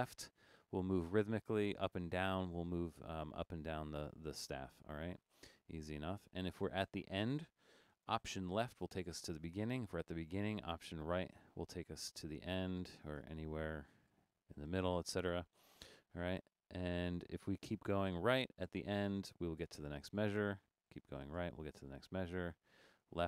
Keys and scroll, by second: 0.0 Right, 0.4 Left, 0.6 Left, 1.0 Left, 1.3 Up, 1.5 Up, 1.8 Up, 2.0 Up, 2.3 Down, 2.5 Down, 2.6 Down, 2.7 Down, 2.9 Up, 3.1 Up, 3.5 Up, 4.0 Right, 4.7 Left, 5.1 Right, 5.4 Right, 5.8 Right, 8.9 alt+Left, 11.2 alt+Right, 12.5 Left, 12.7 Left, 13.2 alt+Left, 13.7 Right, 14.7 Left, 14.9 Left, 15.1 Left, 15.2 Left, 15.4 Left, 17.1 Right, 17.2 Right, 17.5 Right, 18.1 Right, 19.2 Right, 20.0 Right, 20.1 Right, 20.3 Right, 20.4 Right, 20.5 Right, 20.7 Right, 20.9 Right, 21.4 Right, 21.7 Right, 22.0 Left, 22.2 Left, 22.4 Left, 22.6 Left, 22.8 Left, 23.1 Left.